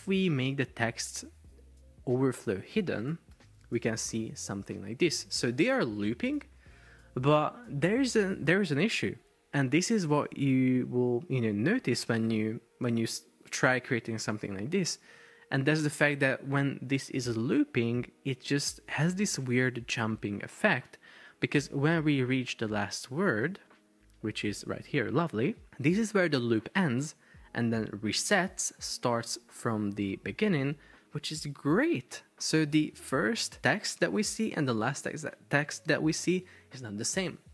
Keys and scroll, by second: 3.4 super+p, 21.2 Escape.